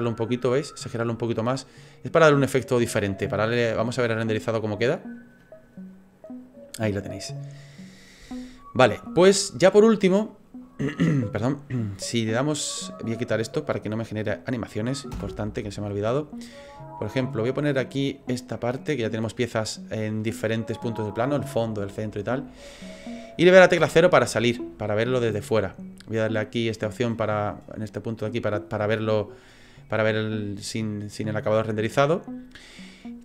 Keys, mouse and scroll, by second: 2.4 click, 4.4 click, 13.4 click, 14.2 right click, 15.1 Delete, 16.5 click, 23.8 KP_0, 24.9 scroll down 3, 26.8 click, 31.1 middle click.